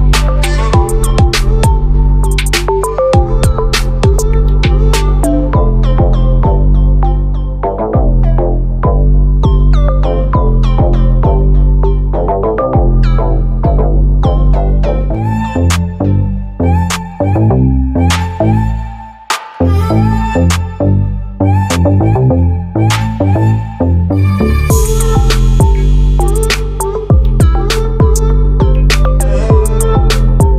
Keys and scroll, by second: 6.8 ctrl+t, 9.6 ctrl+t, 24.1 ctrl+a.